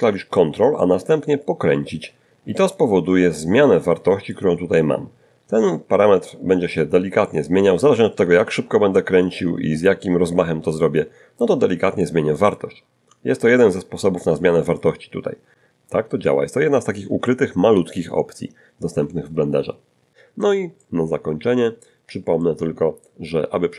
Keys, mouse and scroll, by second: 1.0-1.4 ctrl+scroll up 4, 1.8-2.9 ctrl+scroll up 4, 3.0-4.0 ctrl+scroll up 6, 5.8-9.6 ctrl+scroll down 4, 9.6-12.0 ctrl+scroll up 4, 12.0-14.2 ctrl+scroll up 1, 14.2-15.4 scroll up 1, 15.4-16.0 ctrl+scroll up 3, 16.1 ctrl+scroll down 2, 20.0 middle click, 20.8-22.0 middle drag, 22.4 middle click.